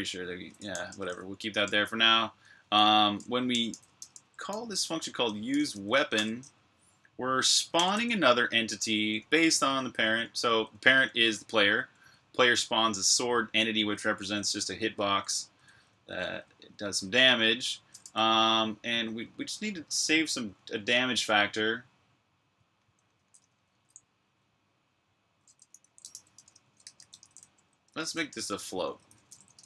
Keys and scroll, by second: 0.0-1.0 typing, 1.5 super+j, 2.3 super+k, 3.1-6.0 typing, 7.3-11.8 typing, 13.7-17.8 typing, 18.8-21.3 typing, 22.3-23.5 typing, 25.0-29.6 typing.